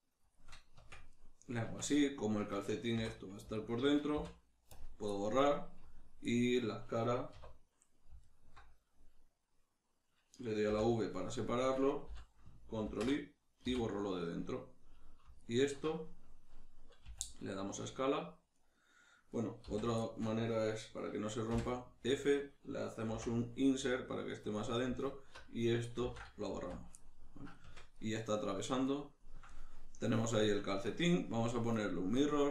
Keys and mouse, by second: 0.4 shift+click, 0.8 Tab, 1.1-3.6 middle drag, 1.7 Tab, 3.6 alt+right click, 4.2 x, 5.1-8.2 middle drag, 7.3 2, 8.2 alt+right click, 10.7 v, 11.1 right click, 11.6 right click, 12.1 l, 15.4 alt+right click, 17.0 s, 18.7 right click, 19.6 z, 20.0-24.6 shift+middle drag, 21.5 f, 24.6 click, 25.0 alt+right click, 26.0 ctrl+x, 26.5 z, 27.0-31.8 middle drag, 27.6 Tab, 31.8-32.5 drag.